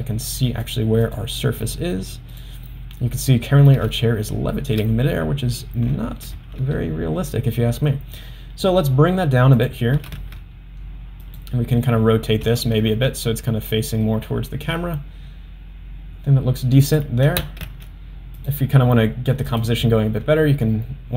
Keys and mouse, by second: 0.7 drag, 1.1 click, 1.7 middle drag, 2.3 click, 2.7-3.0 middle drag, 3.9-4.8 shift+middle drag, 6.4 g, 10.0 r, 12.4 r, 17.4 g, 19.5 click.